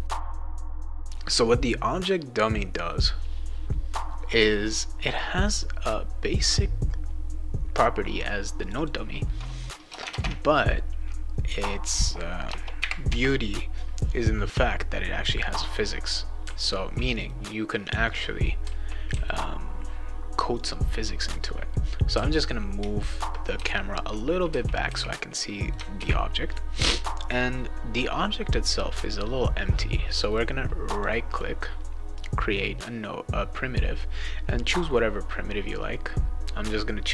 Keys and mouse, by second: 0.1 click, 0.9 click, 8.6 click, 8.7 click, 10.0 Tab, 10.2 Tab, 12.4 BackSpace, 15.3 click, 16.1-17.3 right drag, 16.4 s, 18.0 click, 18.4 right click, 18.6 s, 19.1 w, 20.5 click, 21.2 click, 21.7-25.7 right drag, 22.1-24.9 typing, 25.9 ctrl+s, 27.2 click, 30.2 right click, 30.9 click, 31.3 right click.